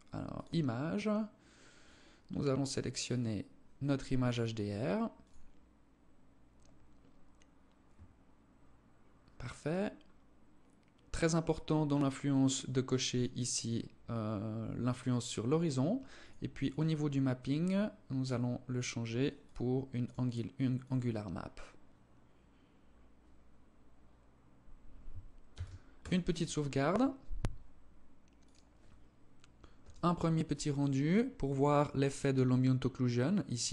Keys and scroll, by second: 24.8 ctrl+s.